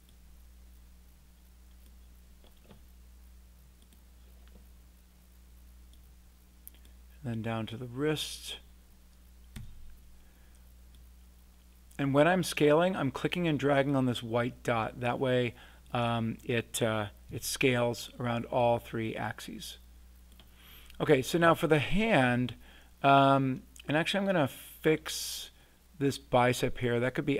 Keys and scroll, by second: 9.5 r, 17.3 w.